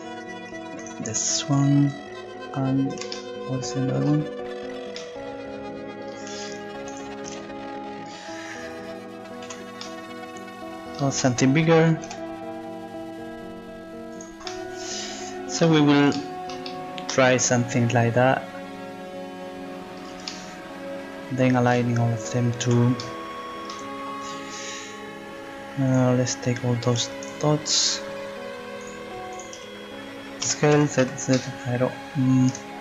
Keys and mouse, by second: 6.9-9.4 right drag, 9.4 z, 12.1 s, 14.1 click, 21.2 middle click, 22.6 z, 24.8 click, 27.2 click, 27.8-30.4 right drag, 30.4 s.